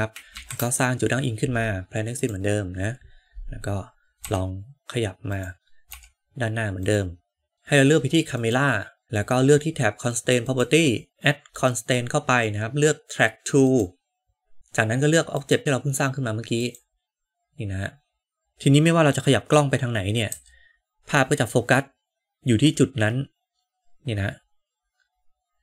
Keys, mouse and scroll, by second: 0.2 shift+a, 4.1 shift+a, 4.1 g, 5.8 g, 11.1-13.8 drag, 15.2-17.0 drag, 20.2 g.